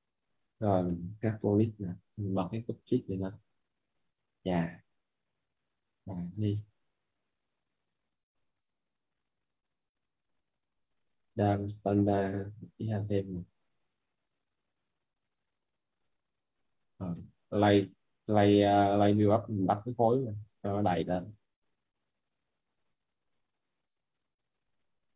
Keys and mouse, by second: 1.2 h, 1.6 p, 2.5 click, 5.0 right click, 5.6 click, 6.7 right click, 7.2 click, 9.9 right click, 10.3-11.6 typing, 11.4 right click, 11.9 click, 12.7 right click, 13.5 alt+click, 14.0 right click, 14.3 alt+right click, 14.8 click, 16.2 right click, 16.7-18.1 typing, 17.9 right click, 19.2 click.